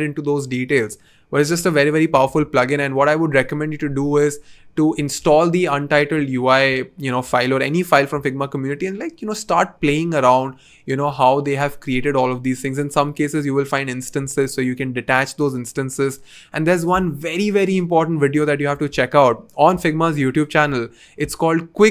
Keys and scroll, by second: 1.5 BackSpace.